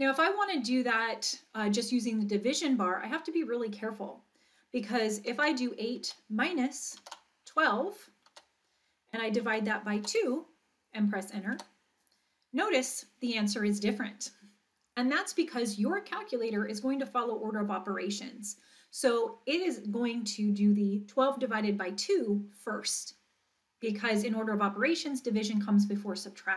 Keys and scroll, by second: 5.4 8, 6.0 -, 7.0 1, 8.3 2, 9.5 /, 10.0 2, 11.5 Return.